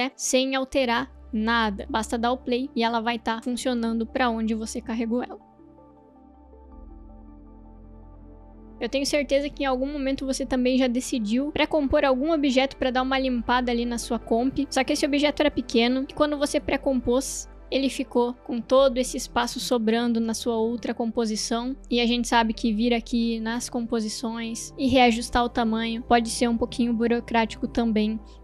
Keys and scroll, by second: 3.1 space, 15.6 space, 16.6 ctrl+shift+c, 23.7 ctrl+k.